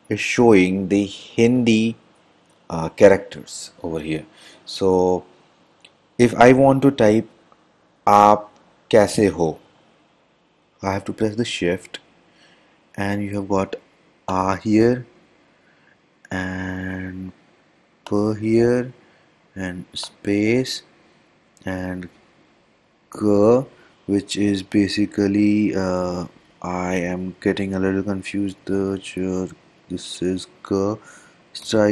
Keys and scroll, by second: 14.4 e, 18.2 h, 31.7 k.